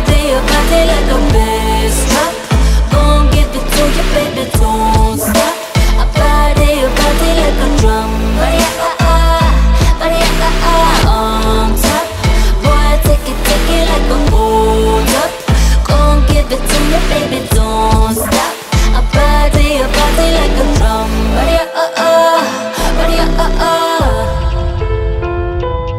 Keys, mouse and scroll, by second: 1.7 alt+click, 2.0 ctrl+b, 5.5-5.8 alt+drag, 5.8 alt+right click, 6.6 alt+right drag, 6.8-7.1 alt+drag, 7.1-9.4 alt+middle drag, 9.4 alt+right drag, 9.6 Tab, 9.8-10.2 alt+drag, 10.2 alt+right click, 10.3-10.9 alt+drag, 11.6 Tab, 13.9 right click, 14.3 g, 15.4 alt+right click, 15.5 alt+click, 15.7 alt+middle drag, 15.8 alt+right click, 15.9 alt+click, 16.1 alt+right click, 16.2-16.6 alt+drag, 16.6 Tab, 18.3 alt+click, 19.1 g, 20.0 Tab, 21.0 Tab, 21.2 alt+click, 23.1 click, 23.7 click, 25.3 click, 25.9 z.